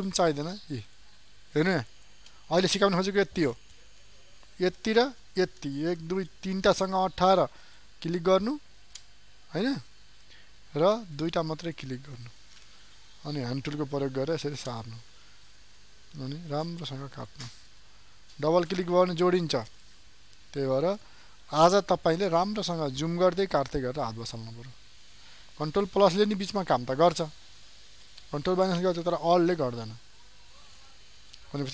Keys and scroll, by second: 7.4 alt+space, 11.0 ctrl+space.